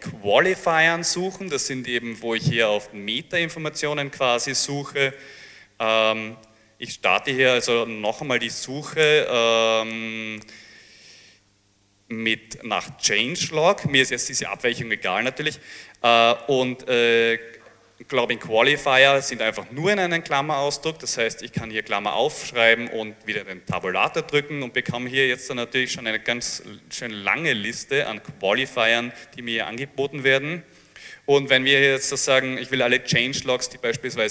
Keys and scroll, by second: 4.2 Up, 5.6 Down, 6.5-10.4 typing, 12.3-14.1 typing, 19.1 shift+8.